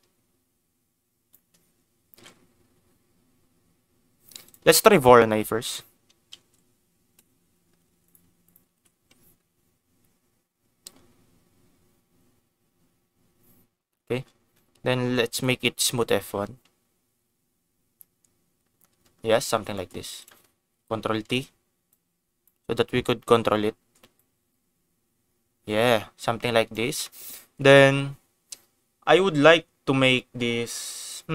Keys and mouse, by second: 2.1 ctrl+s, 4.5 click, 4.9 shift+a, 8.4 click, 11.4 ctrl+x, 15.2 click, 19.7 middle click, 20.1 click, 21.1 ctrl+t, 21.8 click, 24.2-26.7 drag, 27.0 middle click.